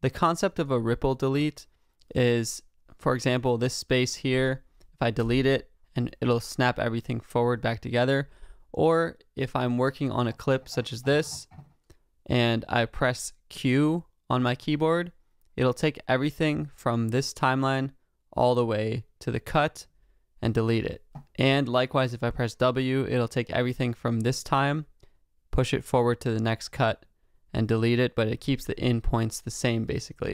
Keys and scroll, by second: 5.2 BackSpace.